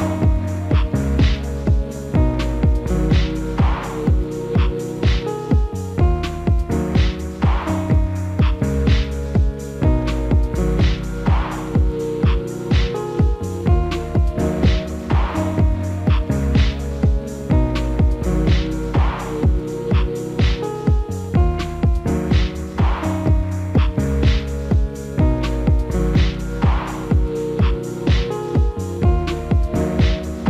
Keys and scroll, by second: 4.8 alt+w, 19.6 alt+w, 22.5 F4, 29.2 F4.